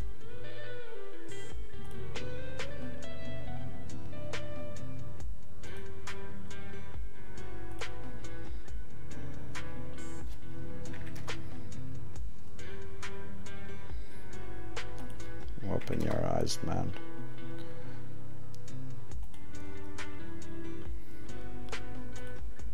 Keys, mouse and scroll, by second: 1.8 click, 15.1 click, 22.1 click.